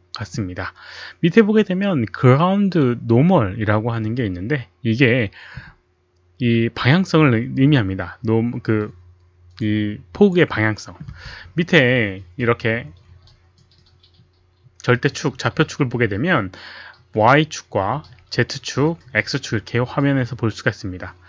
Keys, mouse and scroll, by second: 3.0 Return, 3.0 click, 3.0 KP_1, 3.0 KP_Decimal, 3.0 KP_0.